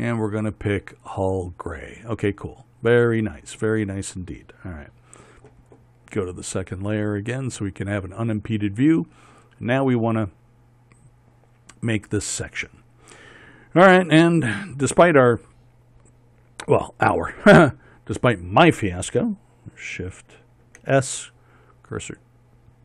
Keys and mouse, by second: 21.4 shift+s.